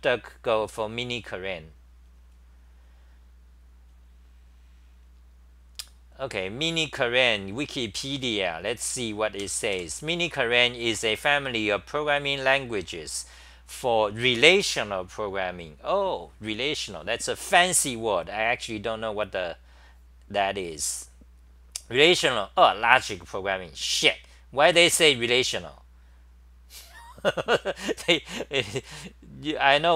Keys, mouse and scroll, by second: 0.0-0.6 typing.